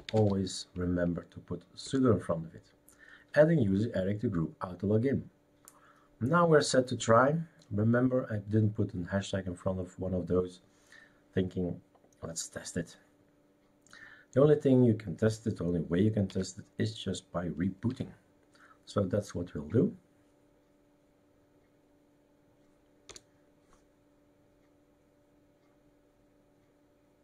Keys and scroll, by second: 0.0-0.5 typing, 1.8 Return, 16.3 super+x, 17.9 r.